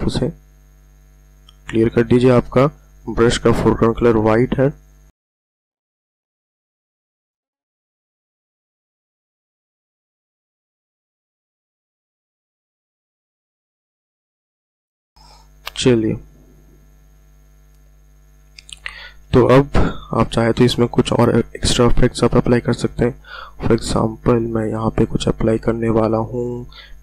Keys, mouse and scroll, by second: 5.4-7.5 typing, 5.5 click, 5.7 click, 6.3 click, 6.7 click, 7.0 click, 7.2 click, 8.0 click, 11.9 space, 12.0 click, 14.7 ctrl+alt+scroll down 1, 15.5 ctrl+alt+scroll up 1, 17.2-18.0 ctrl+alt+scroll down 1, 19.9 click.